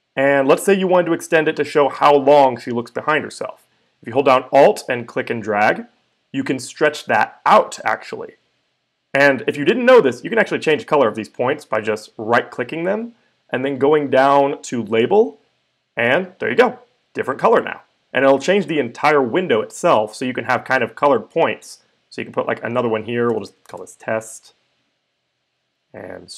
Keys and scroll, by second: 23.0-24.4 typing.